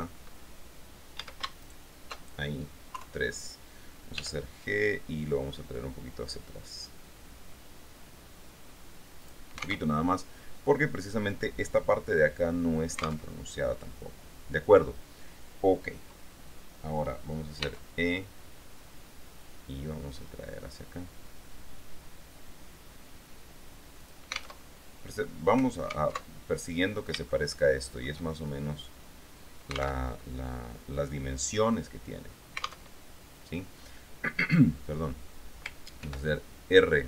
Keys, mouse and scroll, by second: 1.4 a, 1.8 alt+shift+right click, 3.1 KP_3, 4.4 g, 9.4 click, 10.1 alt+Tab, 13.5 alt+Tab, 17.8 e, 24.2 click, 24.8 alt+Tab, 26.6 alt+Tab, 27.5-28.8 shift+middle drag, 30.2 alt+Tab, 33.1 alt+Tab, 36.2 ctrl+r.